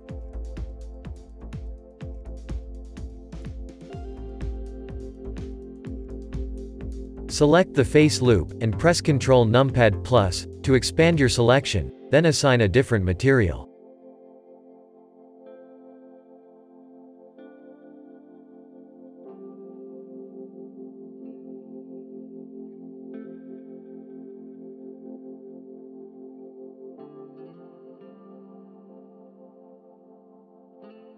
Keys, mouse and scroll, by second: 0.0-1.3 shift+middle drag, 1.3 click, 2.0 KP_Decimal, 2.9-3.8 shift+middle drag, 3.8-4.1 scroll up 3, 4.1-4.7 middle drag, 4.7 Tab, 5.0-5.9 scroll up 4, 5.9-7.0 middle drag, 7.1 click, 8.7 ctrl+KP_Add, 9.7-11.3 shift+middle drag, 11.3 ctrl+KP_Add, 12.6-13.0 scroll down 1, 13.0-14.5 shift+middle drag, 14.5-18.2 drag, 18.2-18.6 scroll down 4, 18.7 Tab, 19.1 click, 19.4-20.2 scroll down 6, 20.2-23.3 middle drag, 23.3-24.2 scroll up 4, 24.2 click, 26.9-27.6 drag, 28.2-28.8 scroll down 4, 28.8-30.6 shift+middle drag, 30.6 click.